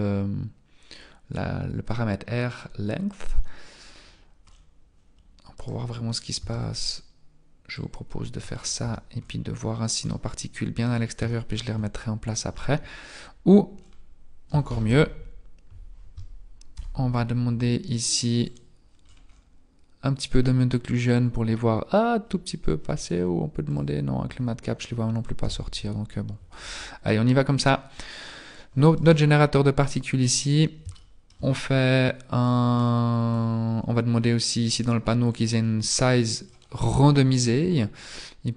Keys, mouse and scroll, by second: 4.0-5.6 scroll down 8, 5.6 right click, 5.6-6.4 scroll down 1, 6.4 Tab, 6.9-7.7 scroll down 1, 7.7 click, 8.6 scroll up 3, 8.8 Tab, 9.2-9.7 scroll up 4, 10.1 middle click, 11.3 shift+middle click, 13.5-14.5 scroll down 5, 14.5-14.8 scroll down 1, 14.9 ctrl+z, 16.7 n, 18.5 click, 19.1-19.9 scroll up 9, 20.4-20.9 scroll up 3, 21.1-21.6 scroll down 4, 23.0 click, 23.7 click, 24.7-25.4 scroll down 1, 25.4 n, 26.5-27.0 scroll up 4, 28.9 right click, 30.9 shift+middle click, 35.4 click, 35.4 scroll up 3, 36.9-37.2 scroll up 3.